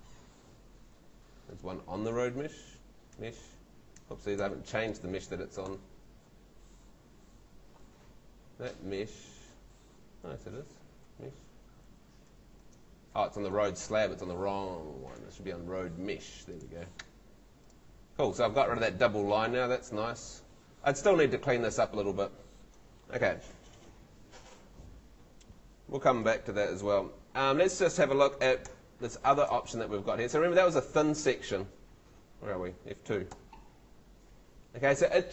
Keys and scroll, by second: 0.6 Escape, 1.0 Tab, 2.2 Tab, 3.3 Tab, 10.3 Tab, 13.1 Escape, 18.2 Home, 28.7 F3, 29.5 F2, 30.3 F3, 32.2 F2, 33.3 F2.